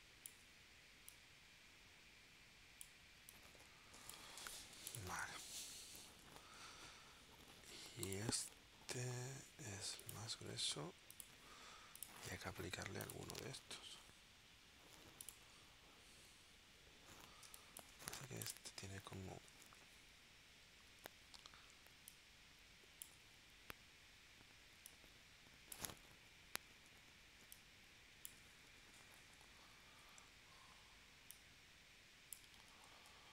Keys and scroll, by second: 4.7 v, 7.0 v, 17.4 space, 19.6 shift+w, 32.9 super+z.